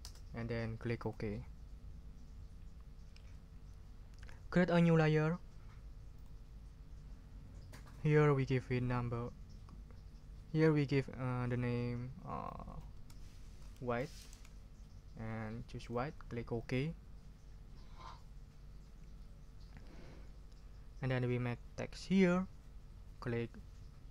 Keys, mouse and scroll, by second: 0.0 Return, 1.0 click, 6.1 click, 13.2-14.8 typing, 15.8 click, 16.5 click.